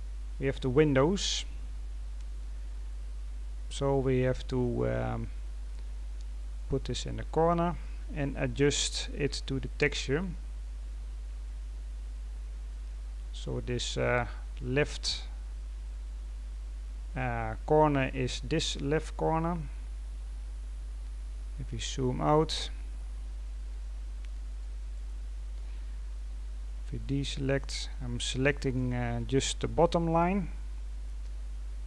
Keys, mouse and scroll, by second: 7.1-8.5 scroll up 11, 8.5-9.2 scroll up 3, 9.2 g, 13.1-16.1 scroll down 2, 16.1-16.9 scroll up 5, 17.2-17.5 scroll down 2, 18.1-19.3 scroll up 5, 19.3-20.0 scroll down 7, 20.0-20.8 scroll up 1, 21.2-22.3 scroll down 8, 23.6-24.9 drag, 24.9 right click, 27.5-29.7 drag, 29.7-30.3 scroll up 2, 30.3-30.8 scroll down 2, 30.8-31.7 scroll up 10, 31.7-31.8 scroll down 2.